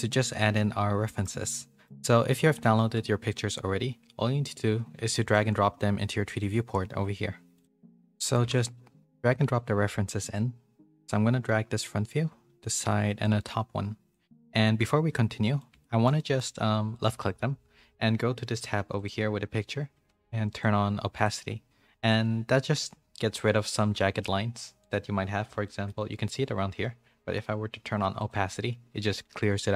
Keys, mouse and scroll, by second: 0.3 middle click, 1.0 shift+middle click, 1.5 middle click, 14.6 middle click, 15.0 middle click, 15.8 shift+middle click, 16.2 middle click, 16.9 click, 20.5 click, 21.1 click, 22.0 click, 23.6 click, 25.6 shift+middle click, 28.2 click.